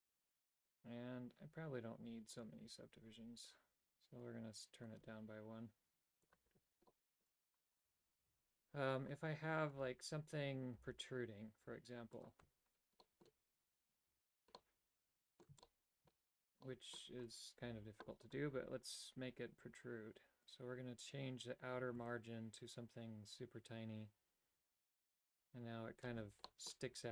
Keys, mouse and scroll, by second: 2.4 click, 5.1 click, 6.4 click, 7.0 middle click, 8.0 right click, 8.4 Tab, 9.8-10.9 right drag, 10.9 g, 12.6 Tab, 13.2 middle click, 14.7 middle click, 15.7 shift+middle click, 16.8 middle click, 17.4-18.5 right drag, 22.2-26.2 shift+drag, 26.6 middle click.